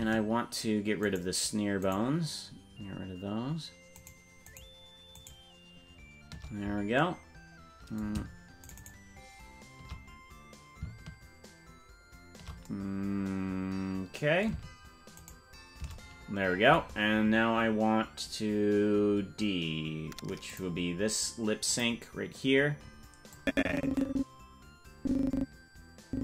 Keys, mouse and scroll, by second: 1.3-4.2 shift+right drag, 4.7 shift+right click, 8.9 shift+right click, 15.4 shift+right click, 20.5 click, 21.7 click, 23.3-26.2 drag.